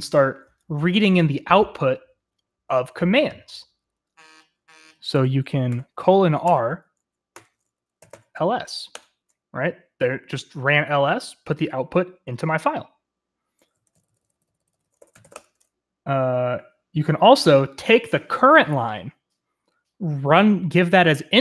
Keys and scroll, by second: 5.8-8.8 typing, 13.6-16.0 typing.